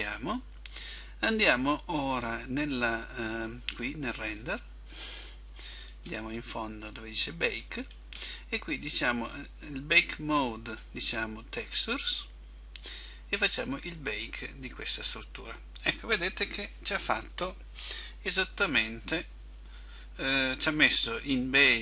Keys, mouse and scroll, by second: 15.1 click.